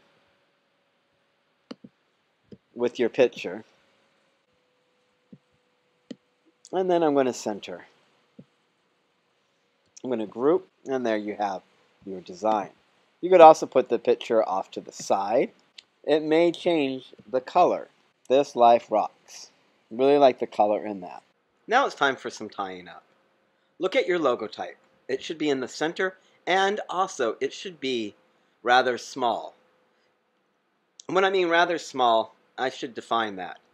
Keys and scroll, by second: 9.8 super+g.